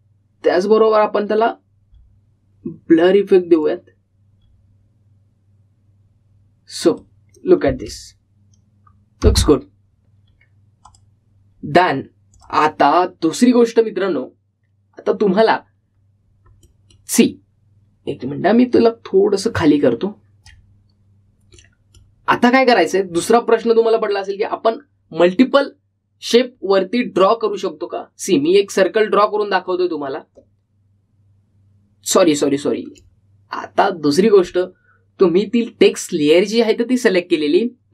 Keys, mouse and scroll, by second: 2.0 click, 3.1-4.6 scroll up 1, 4.6 click, 5.5-7.4 scroll up 1, 8.1 click, 8.8 space, 12.0 click, 17.1-17.6 scroll down 1, 17.7 middle click, 20.6-22.1 drag, 22.1-22.7 scroll up 1, 22.7-27.1 middle drag, 29.6-36.5 drag.